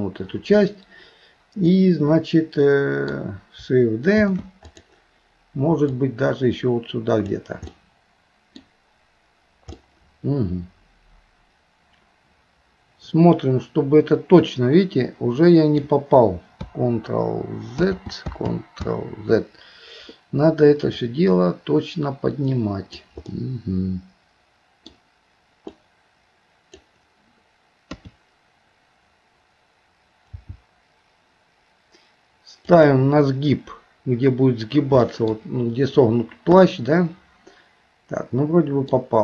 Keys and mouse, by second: 1.7-3.1 middle drag, 6.0-7.7 drag, 7.7 middle click, 9.8-15.8 middle drag, 17.8 ctrl+z, 18.5 ctrl+z, 20.9 click, 21.2-23.0 drag, 23.3-24.9 middle drag, 25.7 click, 25.9 click, 28.0 KP_3, 30.3 g, 35.1 middle click, 36.6-39.0 middle drag.